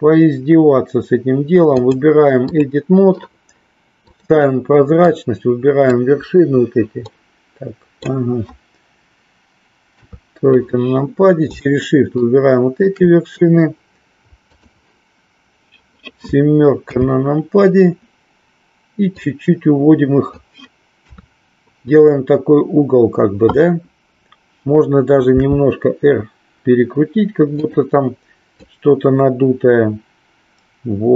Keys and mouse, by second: 1.8 click, 5.0 click, 7.1 middle click, 9.9 KP_3, 12.1 shift+click, 14.5 click, 16.8 KP_7, 19.0-20.3 drag, 21.0 KP_3, 27.6 click, 28.6-31.1 drag.